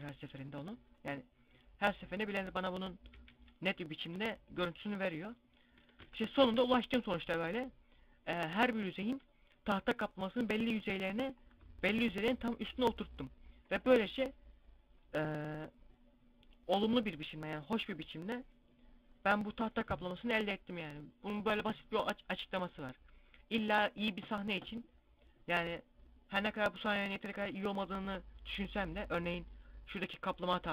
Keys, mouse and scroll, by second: 0.4 a, 0.8 right click, 3.0 z, 3.9 s, 4.6 click, 4.6 g, 5.1 click, 5.6 Tab, 6.1 a, 6.3 a, 6.9-7.2 scroll up 2, 8.6 scroll down 2.